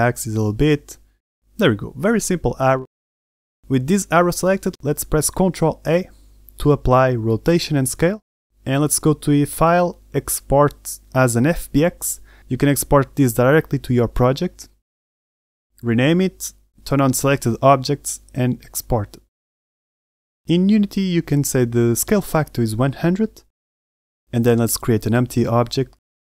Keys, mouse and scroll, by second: 3.1 Tab, 3.1 middle click, 3.1-3.7 scroll down 1, 3.7 Tab, 4.1 middle drag, 6.3 ctrl+a, 9.3 click.